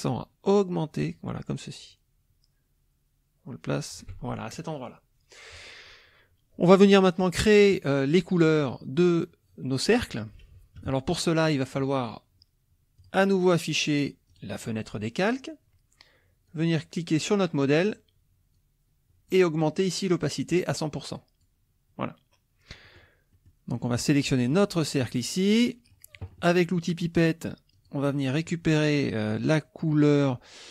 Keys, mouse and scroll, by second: 10.8 KP_Subtract, 11.5 middle click, 13.0 click, 14.3 click, 16.5 click, 18.6 click, 20.6-21.6 drag, 22.9 middle click, 22.9-23.5 scroll up 2, 23.3 middle click, 23.5 click, 24.5 click, 25.5 click, 27.8 click.